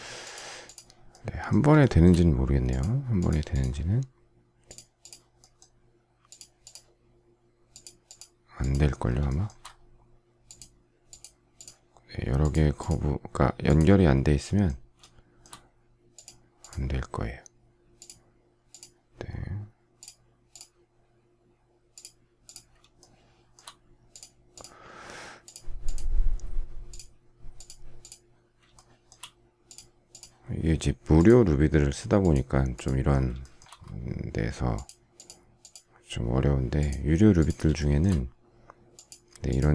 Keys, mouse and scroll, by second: 1.8 shift+middle click, 9.2 shift+middle click, 15.0 shift+middle click, 23.0 shift+middle click, 28.7 shift+middle click, 33.4 shift+middle click, 37.8 shift+middle click.